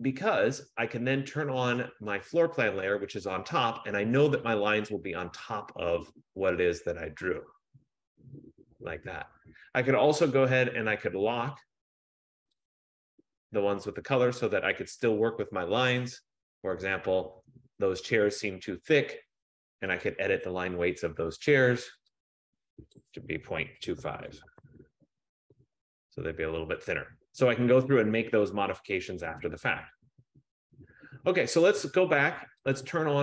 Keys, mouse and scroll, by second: 0.0 click, 2.4 click, 4.7 click, 12.9 click, 18.2 click, 20.2 click, 21.6 F15, 23.2 click, 23.4-24.8 typing, 25.9 click, 32.9 click.